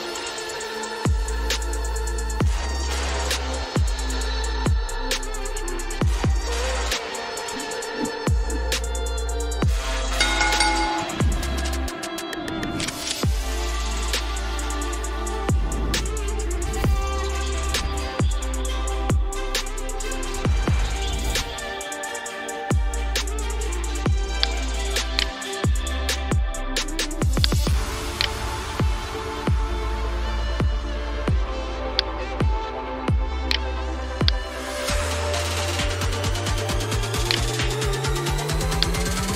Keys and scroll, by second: 0.9 v, 1.5 h, 3.7 v, 4.1 h.